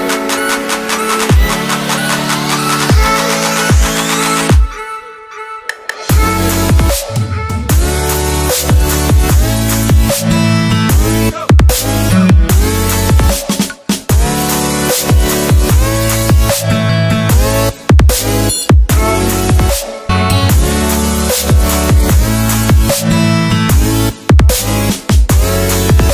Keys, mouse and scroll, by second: 0.7 click, 2.0 alt+Tab, 2.7 click, 4.0 Return, 4.5 click, 6.2 click, 7.8 alt+scroll up 1, 8.2 alt+scroll down 1, 8.4-8.8 ctrl+scroll up 2, 9.3 click, 11.5 Return, 11.7 click, 11.8 Delete, 12.3 click, 12.8 Tab, 13.2 click, 14.5 Tab, 15.2 v, 15.8 click, 17.5-18.7 scroll down 6, 19.3 click, 19.4 Right, 20.6 click, 20.8 Right, 21.7 click, 21.7 Right, 22.6 click, 22.6 Right, 23.4 click, 23.8 Right, 24.7 scroll up 1, 24.8-25.2 scroll down 2, 25.3-26.1 scroll up 3.